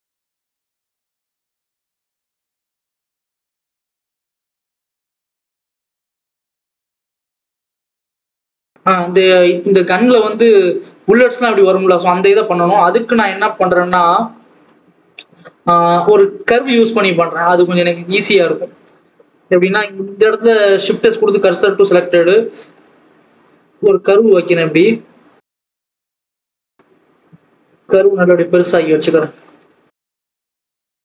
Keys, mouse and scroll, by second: 0.7 KP_0, 1.4 click, 1.7-2.0 scroll up 2, 2.0-2.4 scroll down 4, 2.4 alt+a, 2.5 click, 3.5-3.9 scroll up 1, 3.9 click, 4.2 g, 5.3 alt+a, 5.7 click, 14.6 click, 14.9 scroll up 2, 15.1-16.3 scroll down 1, 16.3 click, 16.6-17.7 scroll up 2, 17.7 click, 20.4 click, 21.3 shift+s, 21.5 alt+a, 24.4 shift+a, 25.1-25.6 scroll up 1, 25.6 scroll down 1, 25.8 KP_1, 26.4 scroll up 1, 26.5 scroll down 4, 26.8 scroll up 1, 27.0 s, 29.5 click, 29.8 scroll up 2, 30.0-30.4 scroll down 1, 30.4 KP_3, 30.9-31.0 scroll up 4.